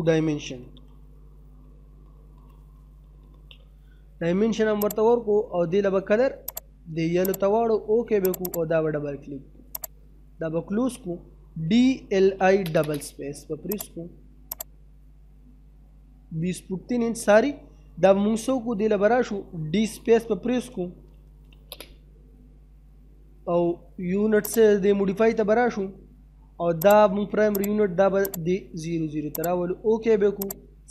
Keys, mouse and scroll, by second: 0.2-3.4 typing, 4.8 click, 10.4 middle click, 11.1 d, 12.3 space, 12.7-13.7 scroll up 1, 13.7 click, 14.9 scroll up 1, 15.6 middle click, 16.0-16.6 scroll down 2, 16.2 middle click, 16.9 middle click, 18.1-18.7 scroll up 1, 18.7 middle click, 20.3-21.7 typing, 24.4 click, 26.8 click.